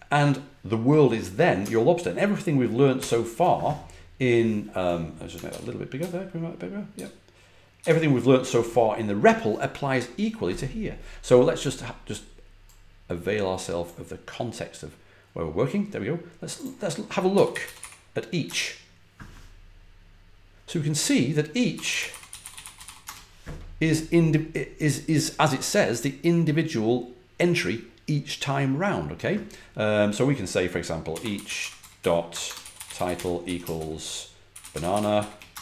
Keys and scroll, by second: 2.9 shift+super+y, 5.4 super+=, 5.9 super+=, 6.8 super+-, 7.7 super+=, 17.0-18.2 typing, 18.3 Return, 21.6-23.2 typing, 30.7-35.6 typing.